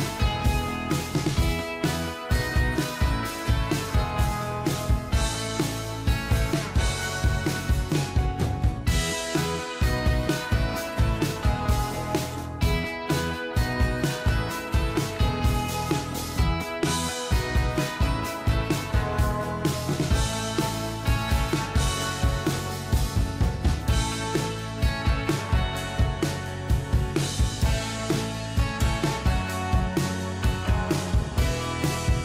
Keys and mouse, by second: 2.8 ctrl+a, 8.3 ctrl+t, 9.0 shift+click, 11.6 click, 12.6 ctrl+a, 14.3 ctrl+d, 15.5 ctrl+t, 16.8 shift+click, 19.9 alt+click, 22.6 alt+click, 28.0 Down, 30.2 Down, 30.4 Down, 30.6-32.2 Down.